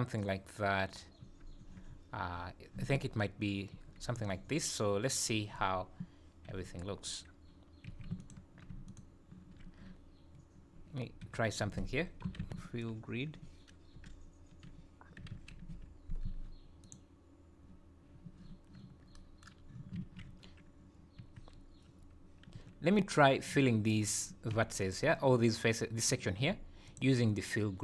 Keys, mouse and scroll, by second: 1.2 Tab, 1.6 Tab, 1.9 scroll down 3, 2.3-2.7 scroll up 2, 3.7 Tab, 4.4 scroll up 2, 6.5 2, 7.9 2, 8.2 alt+click, 8.9 alt+shift+click, 11.3 F3, 20.0 alt+a, 20.4 scroll up 1, 21.2 1, 22.8 3, 24.5 2, 24.8 click, 26.9 ctrl+click.